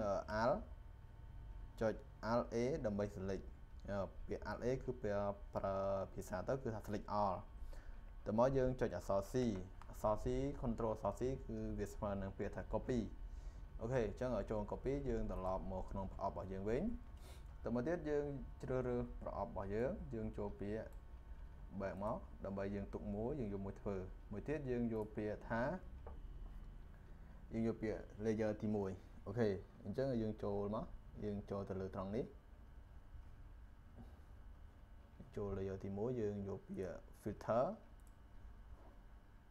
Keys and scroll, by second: 9.2 ctrl+c.